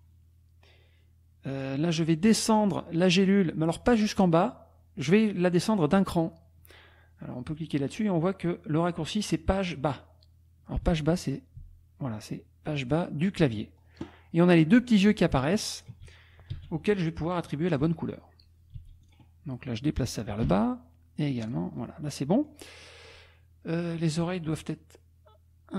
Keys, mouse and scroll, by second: 1.6 click, 10.8 Page_Down, 15.0 click, 15.8 shift+click, 16.5 d, 17.7 click, 18.7 s, 19.1 click, 20.4 Page_Down, 21.4 click, 21.8 click.